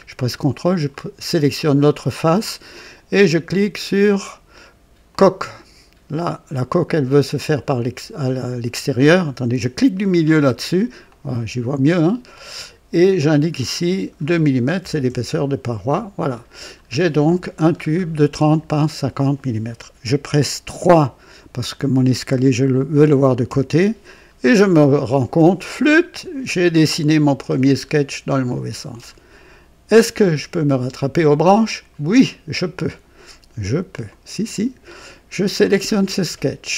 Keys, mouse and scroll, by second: 0.6 ctrl+click, 5.0 click, 10.1 middle click, 11.0-12.6 drag, 13.5 click, 14.8 KP_2, 15.0 KP_Enter, 16.4 scroll down 2, 17.6-18.0 scroll down 2, 18.7 scroll down 2, 23.4 KP_3, 24.1-24.5 scroll down 2, 24.8 right click, 26.6-27.6 right drag, 27.7 scroll down 1, 28.4-29.0 right drag, 34.0 click, 35.5 click.